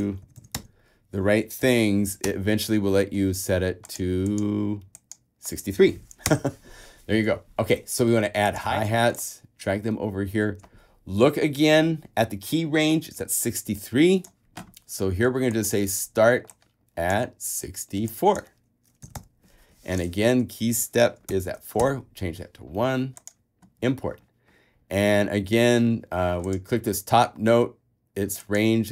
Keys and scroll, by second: 0.0-0.8 typing, 2.0 BackSpace, 2.1 Return, 6.1 Return, 10.4 super+a, 19.2 6, 20.4 4, 21.5 Tab, 22.0 |.